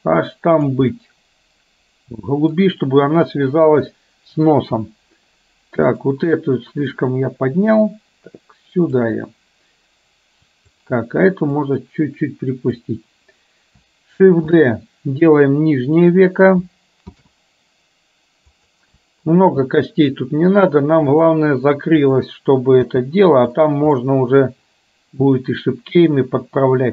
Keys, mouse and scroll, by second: 1.0-2.6 middle drag, 3.7 KP_1, 5.9 click, 7.1-9.2 drag, 11.6-12.9 drag, 14.6 shift+d, 22.1 click, 24.1-26.9 middle drag.